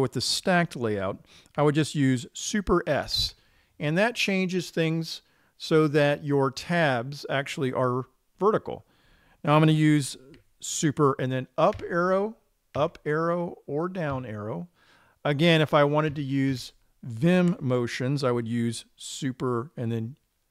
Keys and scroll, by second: 3.6 super+s, 12.3 super+Up, 16.6 super+Up.